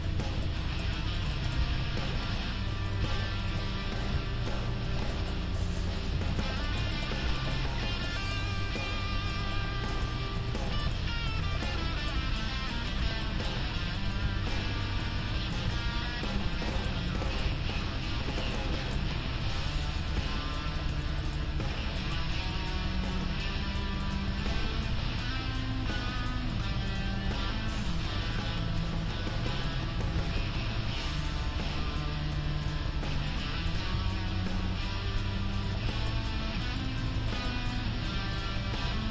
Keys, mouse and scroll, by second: 1.6 g, 2.9 middle click, 3.1 g, 4.1 g, 5.1 middle click, 6.1 g, 7.8 click, 8.0-9.1 right drag, 8.4 g, 9.1-10.4 middle drag, 10.4 right click, 10.9 g, 12.2-13.9 middle drag, 12.2 g, 14.2 g, 15.0 click, 15.2-16.7 right drag, 15.7 g, 16.7-18.7 drag, 17.5 g, 18.7-20.0 middle drag, 19.0 g, 20.0-21.8 right drag, 20.3 g, 21.1-26.2 middle drag, 21.8-23.8 drag, 22.8 g, 24.8 g, 26.5-28.7 right drag, 27.3 g, 28.8-31.5 right drag, 30.0 g, 31.5 g, 33.3-35.6 right drag, 34.0 g, 35.9 middle click, 36.8-39.1 right drag, 38.8 g.